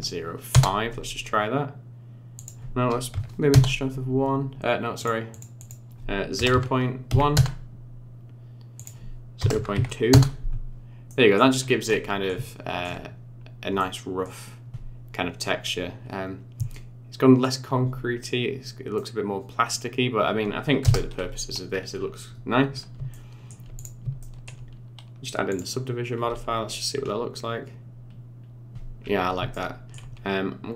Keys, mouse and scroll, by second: 2.3 click, 5.0 click, 5.6 click, 8.7 click, 11.1 middle click, 11.5 scroll up 5, 11.8 middle click, 12.4 shift+middle click, 13.0-13.4 scroll up 3, 13.4 scroll down 2, 13.8 middle click, 16.1-16.5 scroll down 1, 16.7 middle click, 18.9 middle click, 20.2 scroll down 2, 20.8 KP_0, 21.6-22.9 scroll down 13, 23.1 shift+middle click, 23.7 click, 24.2 shift+middle click, 25.7 click, 26.2-27.1 scroll up 14, 29.0 scroll down 5, 29.5 shift+middle click.